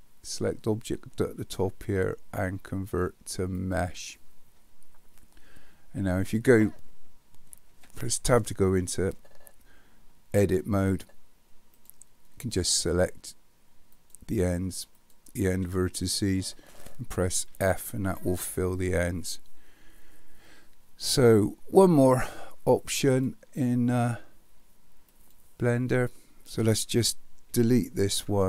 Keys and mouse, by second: 7.7 Tab, 11.8 click, 12.5 shift+click, 14.0 shift+click, 17.5 f, 23.1-25.3 drag, 27.6 Delete.